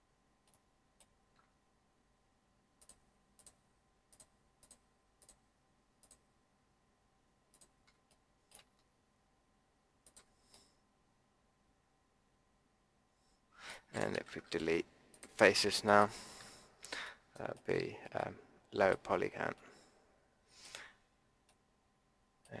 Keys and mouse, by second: 2.7-8.1 drag, 8.1-12.2 middle drag, 14.4 Delete, 15.4 middle click, 15.5 middle click, 16.3 Tab.